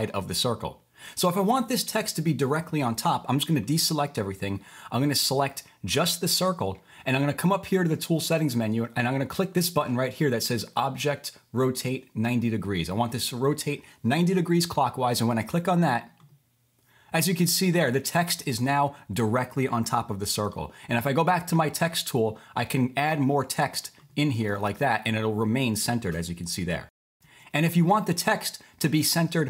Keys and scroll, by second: 15.0 typing, 20.4 typing, 24.2-25.2 typing, 26.6 super+z, 27.2 super+z, 28.1 super+z.